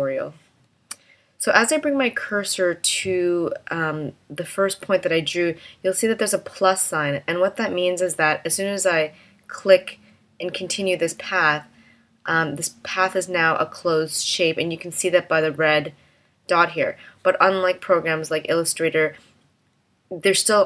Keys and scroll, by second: 0.1 space.